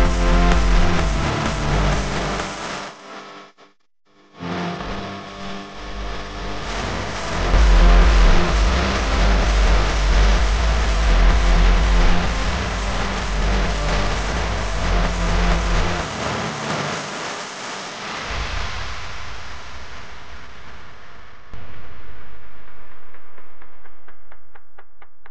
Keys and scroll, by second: 0.4 space, 0.9 alt+super+space, 1.2 alt+super+space, 1.3 alt+super+space, 1.3 alt+super+space, 2.6-3.8 typing, 6.9 space, 8.1 space, 8.6 super+space, 8.7 super+space, 9.1 super+space, 9.9 space, 10.4 alt+super+space, 10.4 alt+super+space, 10.7 alt+super+space, 10.8 alt+super+space, 10.9 alt+super+space, 13.9 space, 14.4 alt+super+space, 14.4 alt+super+space, 14.8 alt+super+space, 15.4 super+space, 15.5 super+space, 15.6 super+space, 15.7 super+space, 15.8 super+space, 15.9 super+space, 17.1 super+space, 17.4 super+space, 17.5 super+space, 18.5 space, 19.0 alt+super+space, 19.1 alt+super+space, 19.2 alt+super+space, 19.3 alt+super+space, 19.3 alt+super+space, 19.4 alt+super+space, 20.1 super+space, 20.2 super+space, 20.3 super+space, 20.4 super+space, 20.5 super+space, 21.0 super+space, 22.1 super+space, 23.0 p.